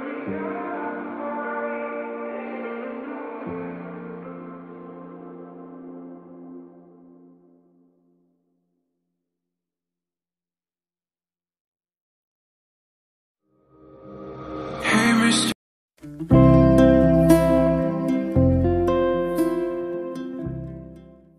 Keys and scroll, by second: 1.5 space, 10.3 space, 10.7 0.